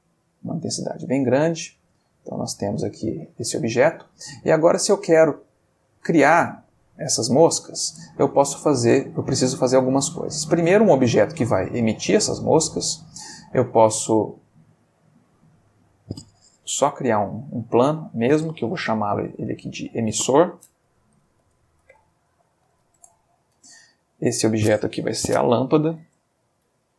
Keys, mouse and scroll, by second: 0.1 click, 1.1-1.7 middle drag, 2.4 click, 2.9-3.8 middle drag, 4.1-4.9 middle drag, 5.9 click, 6.2 g, 7.1 click, 7.8 middle click, 8.9 click, 9.5-9.9 shift+middle drag, 15.4 x, 15.6 click, 16.5 shift+a, 17.2 click, 17.8 g, 18.3 click, 18.8 F3, 20.9 F2, 21.9-22.8 typing, 22.9 shift+Return, 24.1 click, 25.1 F2, 25.7 shift+F2, 26.0-26.9 typing.